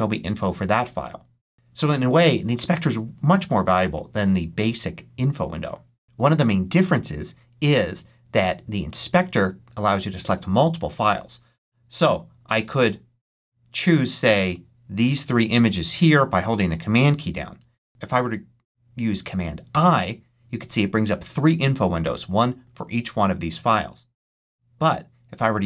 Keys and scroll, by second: 19.6 super+i.